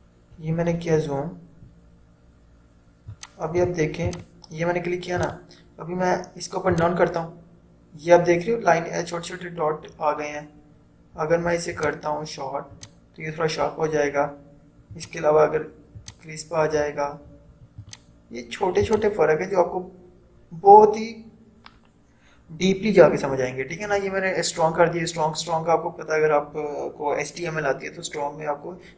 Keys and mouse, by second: 3.2 click, 3.2 click, 12.0 click, 16.1 click.